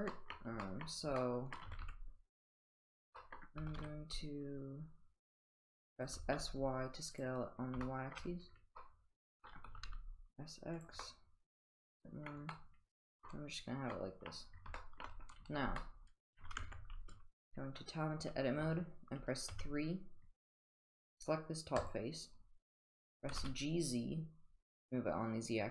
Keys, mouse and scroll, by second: 0.2 middle drag, 0.6 middle drag, 1.2-1.5 middle drag, 1.7 s, 3.1 middle click, 3.6 s, 6.1 s, 7.8-8.1 shift+middle drag, 8.8-9.4 middle drag, 9.7 s, 11.0-12.3 middle drag, 12.5-13.2 middle drag, 13.9-14.3 middle drag, 14.8 shift+middle drag, 15.8-16.2 middle drag, 16.6 Tab, 19.5 3, 23.3 g.